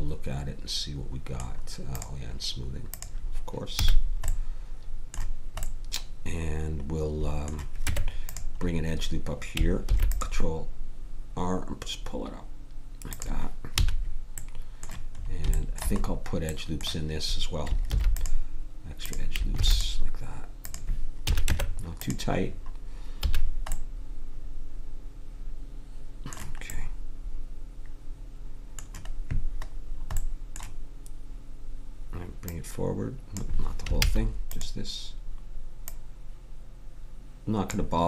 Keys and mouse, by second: 1.9-5.0 drag, 3.8 a, 7.8 Tab, 9.8 ctrl+r, 13.7 a, 17.8 ctrl+r, 19.5 ctrl+r, 21.3 a, 21.4 Tab, 23.2 a, 29.8 middle click, 32.4-34.0 drag, 34.0 ctrl+z, 36.2-37.2 drag.